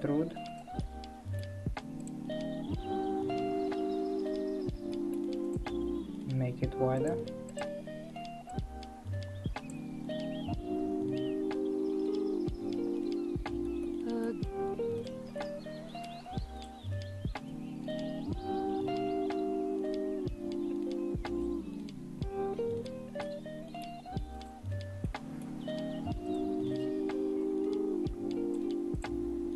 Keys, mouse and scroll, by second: 0.7-1.9 middle drag, 1.9 click, 2.6 e, 4.9 middle click, 5.5 click, 7.1 click, 7.6 click, 8.5 click, 10.5 ctrl+z, 13.2-13.8 scroll up 2, 13.8-15.0 shift+middle drag, 15.0 shift+click, 15.3 scroll up 1, 15.4-16.6 middle drag, 16.6 shift+click, 22.6 ctrl+z, 23.2-24.3 middle drag, 24.3 click, 25.0-25.9 middle drag, 25.9 1, 26.3 click, 26.8 click, 27.4 click, 28.9 click.